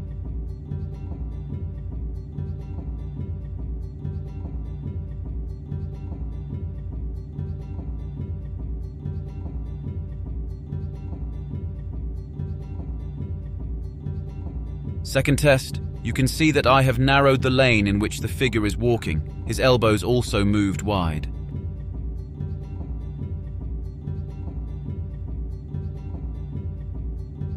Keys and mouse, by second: 0.0 click, 0.3 click, 0.5 click, 0.7 click, 0.8 click, 0.9 click, 1.1 click, 1.1 typing, 1.2 click, 1.6 click, 2.0 click, 2.4 click, 2.6 click, 2.7 click, 2.9 click, 3.0 click, 3.7 click, 4.3 click, 4.6 click, 4.8 click, 5.0 middle click, 5.2 click, 5.7 middle click, 6.0 click, 6.2 click, 6.4 click, 7.0 click, 7.2 click, 7.5 click, 7.9 click, 8.1 click, 8.4 click, 8.8 click, 8.9 click, 9.0 click, 9.2 click, 9.3 click, 9.5 click, 9.8 click, 10.0 click, 10.3 click, 10.4 a, 10.5 KP_Decimal, 11.3 click, 11.4 click, 11.6 click, 12.0 click, 12.7 click, 13.1 click, 13.4 click, 13.4 click, 13.6 click, 14.0 click, 14.4 click, 14.7 click, 15.2 click, 15.4 click, 15.9 a, 15.9 click, 16.1 ctrl+c, 17.1 click, 20.2-20.7 drag, 21.0 Delete, 21.2 Delete, 21.2 click, 21.8 click, 22.4 click, 22.7 click, 23.0 click, 23.2 click, 23.4 click, 23.7-25.0 drag, 25.5 ctrl+c, 25.9 click, 26.7 click, 27.2 ctrl+shift+v.